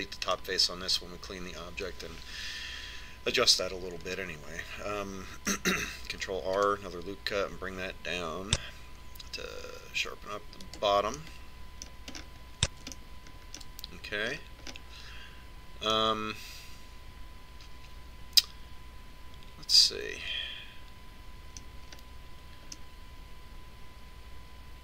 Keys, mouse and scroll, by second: 0.8-2.4 middle drag, 2.7 middle click, 5.8-7.9 middle drag, 8.4 ctrl+r, 13.1-19.6 middle drag, 23.7-24.8 middle drag.